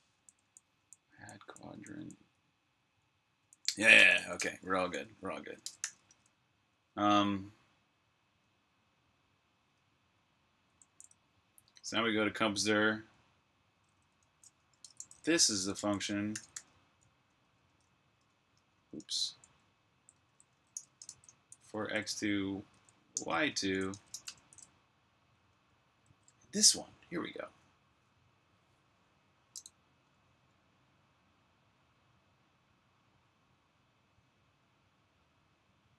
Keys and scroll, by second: 0.4-1.8 typing, 3.3-4.1 typing, 5.3-6.5 typing, 10.8 super+j, 11.5 super+k, 13.7-26.3 typing.